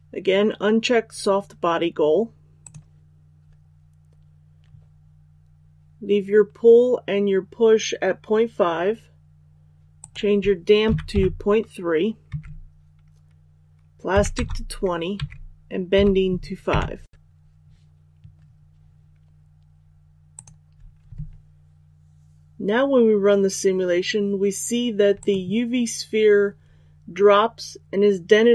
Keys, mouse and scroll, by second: 2.6 click, 10.8 KP_Decimal, 11.1 KP_3, 12.2 Tab, 14.1 KP_2, 15.1 Tab, 15.9 KP_5, 20.3 click.